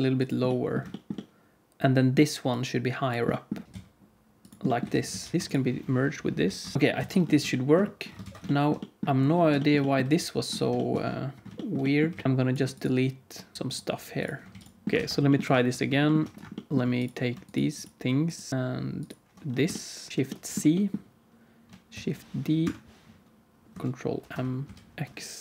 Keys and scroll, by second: 3.6 g, 4.8 Tab, 5.0 alt+z, 5.3 alt+a, 5.3 ctrl+s, 6.7 ctrl+j, 6.8 Tab, 6.8 alt+a, 6.8 ctrl+s, 6.9 alt+z, 8.2 ctrl+s, 10.0 alt+z, 12.0 alt+z, 14.4 x, 14.8 ctrl+z, 14.8 alt+a, 14.8 ctrl+s, 14.8 shift+c, 14.9 ctrl+s, 20.1 shift+c, 21.9 shift+d, 24.0 ctrl+m.